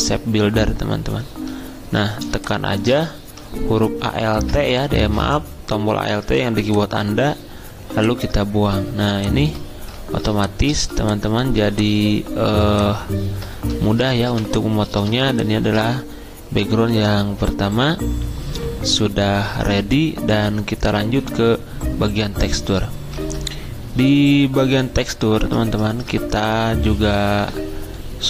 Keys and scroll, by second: 14.3 v, 23.2 alt+Tab, 25.2 alt+Tab, 25.4 alt+Tab.